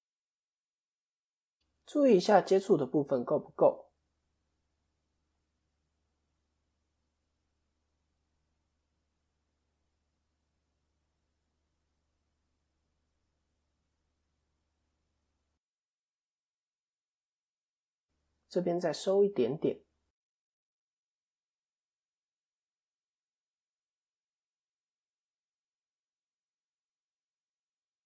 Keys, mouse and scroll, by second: 1.5-1.8 scroll up 1, 2.1 middle click, 3.1-3.6 scroll down 1, 3.6 KP_7, 4.3 scroll down 3, 5.0 scroll down 4, 5.1 shift+middle click, 6.2 click, 9.2 KP_3, 11.1 ctrl+KP_3, 11.9-12.5 scroll up 5, 12.8 middle click, 12.8-14.1 scroll up 1, 16.1 KP_7, 16.7 scroll down 1, 17.4 scroll down 4, 17.5 shift+middle click, 20.8 click, 24.3 click, 26.0 click, 27.4 ctrl+z.